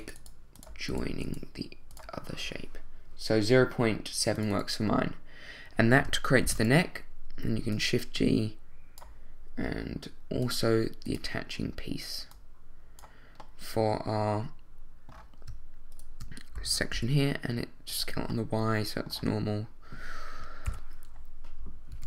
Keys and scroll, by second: 16.5 shift+s, 16.9 y, 20.6 7, 21.9 1.